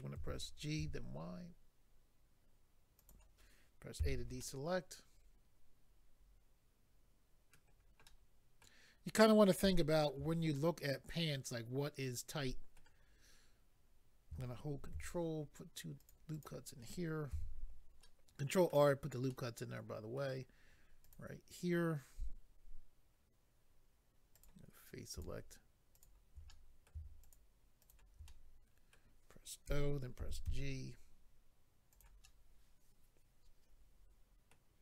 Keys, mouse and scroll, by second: 0.2 g, 0.8 y, 3.0 click, 3.1 click, 4.0 a, 4.4 middle click, 8.0 middle click, 9.7 shift+middle click, 15.4 ctrl+r, 15.4-16.0 scroll up 1, 16.0 click, 16.1 click, 16.3 click, 16.4 double click, 17.3 a, 18.0 middle click, 19.3 middle click, 21.0 click, 24.3 click, 25.1 click, 25.9 shift+click, 26.5 middle click, 27.2 shift+click, 27.8 shift+click, 28.3 middle click, 29.7-30.4 typing, 31.9 click, 32.0 click, 32.2 middle click.